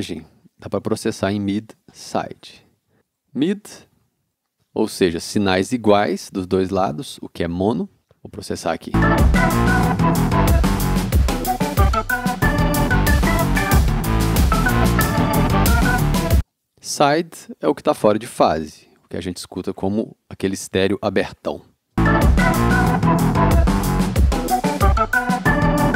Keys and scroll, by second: 8.9 space, 16.3 space, 21.9 space.